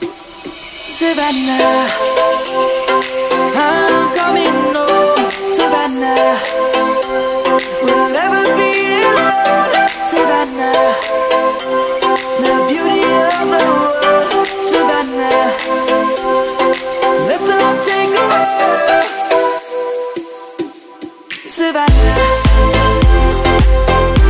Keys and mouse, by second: 0.4 s, 2.8 click, 3.6 s, 5.1 click, 5.7 middle click, 6.5 Tab, 7.5 click, 8.0 middle click, 8.7 Tab, 9.8 middle click, 11.4 click, 15.8 Tab, 16.2 click, 16.8 middle click, 18.1 click, 18.4 Tab, 18.8 click, 19.3 middle click, 22.5 middle click.